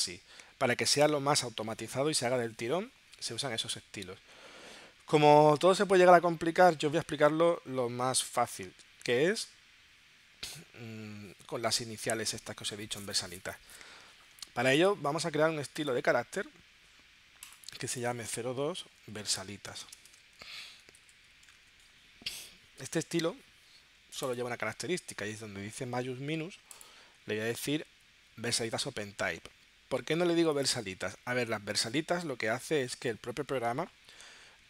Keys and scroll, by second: 18.9 0, 21.8-22.6 typing.